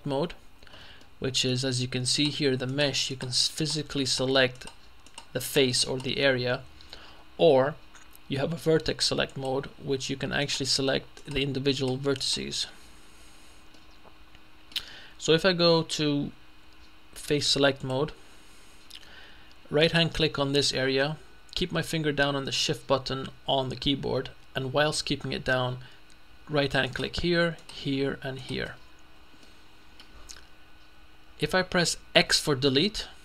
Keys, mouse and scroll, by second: 1.1 middle click, 2.2 right click, 3.2-5.2 right drag, 5.6 middle click, 5.6-6.6 right drag, 9.4 click, 10.5 right click, 11.3 right click, 12.2 right click, 13.8-15.2 middle drag, 17.8 click, 26.9 shift+right click, 27.6 right click, 28.7 right click, 29.5-30.5 middle drag, 32.9 x.